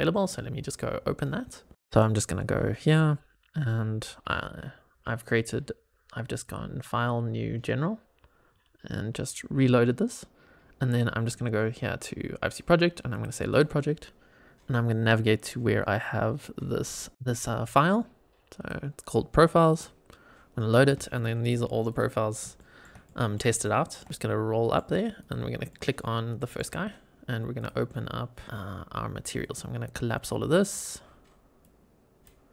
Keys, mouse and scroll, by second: 6.3-8.6 drag, 13.0 click, 20.7 scroll down 2, 21.1-21.4 middle drag, 21.8 click, 22.1 scroll up 2, 22.5 shift+middle drag, 23.0 middle click, 23.5-23.9 shift+middle drag, 24.1-24.7 middle drag, 25.1 click, 25.6 middle click, 26.3 middle click, 27.7-28.4 drag, 29.3-30.2 drag, 30.5 click, 31.5-32.2 drag.